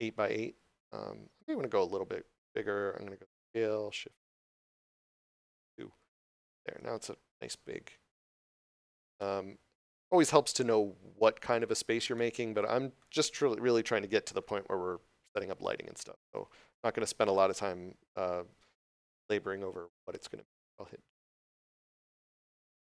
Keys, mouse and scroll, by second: 0.7 middle click, 3.2 s, 5.5 2, 6.1 Return, 8.4 scroll up 1, 9.2 middle click, 11.3 3, 11.6 right click, 12.0 middle click.